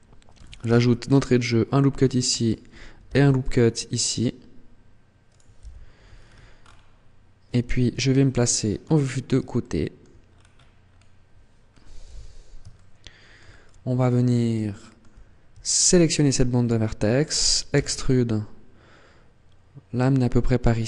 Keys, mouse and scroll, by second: 0.4 ctrl+r, 2.2 click, 2.8 ctrl+r, 5.2 click, 5.4 z, 5.9 scroll down 5, 6.4-6.8 scroll up 4, 7.7 KP_3, 8.4-9.3 scroll down 6, 9.4 shift+middle click, 10.0 scroll down 2, 10.3-11.0 scroll up 8, 11.6 scroll up 3, 11.8 z, 12.5 shift+middle click, 13.4 scroll down 1, 14.0 scroll up 1, 14.4 shift+middle click, 15.6 alt+right click, 17.5 e.